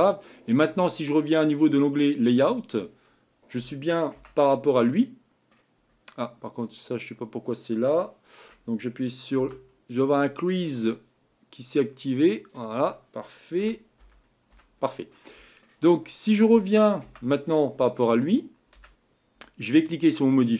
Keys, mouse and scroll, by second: 2.8-4.1 scroll up 5, 4.1 Tab, 4.5-5.8 middle drag, 5.8 scroll up 2, 6.6 click, 9.4 n, 11.9-13.6 drag, 13.6 a, 14.0 a, 15.1 middle click, 15.9-17.0 scroll down 1, 17.0 Tab, 18.7 a.